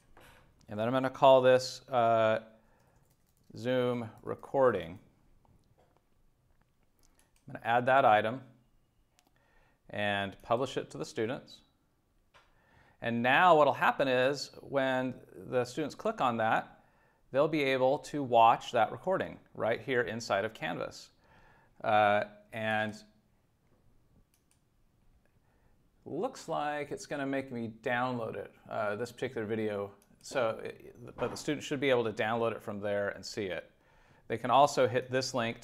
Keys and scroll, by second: 2.6-5.3 typing.